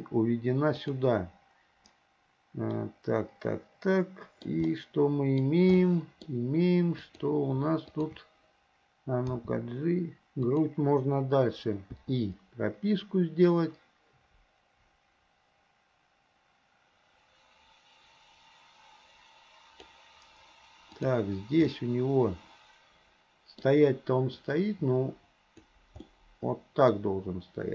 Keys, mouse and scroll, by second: 2.8-4.5 middle drag, 4.5 scroll down 1, 4.7-5.5 scroll up 1, 5.8 scroll up 1, 6.0 middle click, 6.3-7.0 scroll down 1, 7.0 click, 7.9 shift+click, 9.4 g, 12.0 i, 13.5-20.0 drag, 21.0 click, 21.8-23.7 middle drag, 24.5-25.8 drag, 26.1-27.7 middle drag.